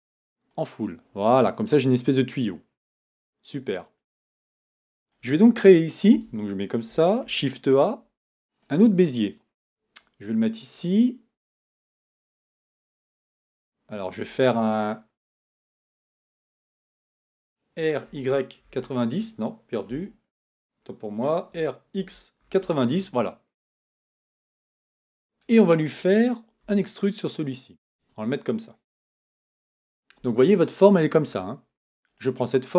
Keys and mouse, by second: 3.6 KP_1, 6.1 KP_1, 6.8 Tab, 7.2 shift+a, 17.8 r, 21.5 r, 23.9 Tab, 26.6 e, 29.1 Tab, 32.1-32.7 right drag.